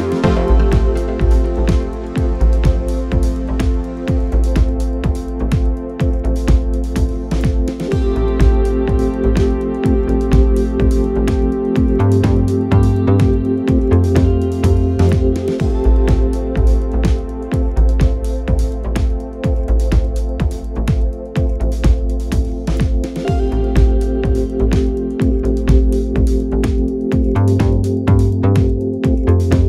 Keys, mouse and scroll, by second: 9.3-11.1 middle drag, 10.3-12.1 drag, 12.7-14.3 drag, 15.3-16.8 drag, 16.9 click, 26.4-28.2 drag, 29.6 click.